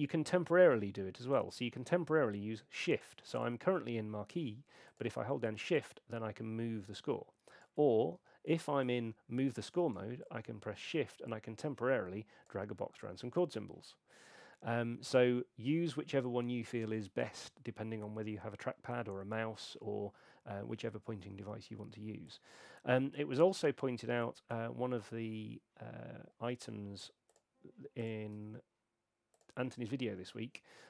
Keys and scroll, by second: 8.1 shift+h, 28.3 s.